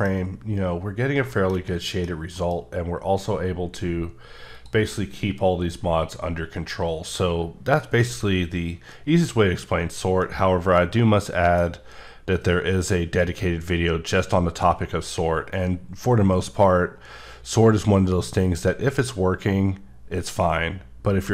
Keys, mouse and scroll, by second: 0.9-1.3 scroll down 2, 1.3 shift+middle click, 2.6 scroll up 1, 3.6-4.5 scroll up 1, 4.5 click, 10.2 middle click.